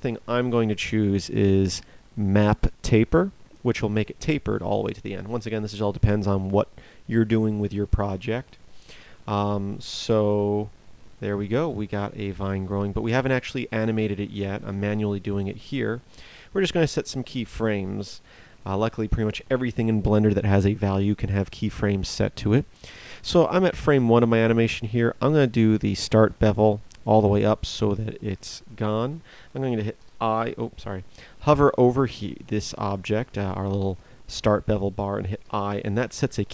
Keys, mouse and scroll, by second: 29.9 i, 35.4 i.